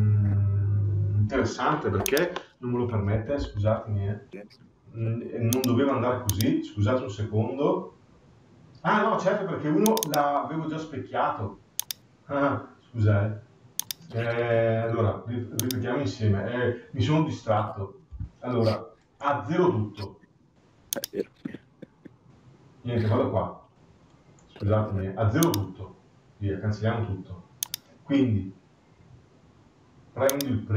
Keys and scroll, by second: 3.1 Escape.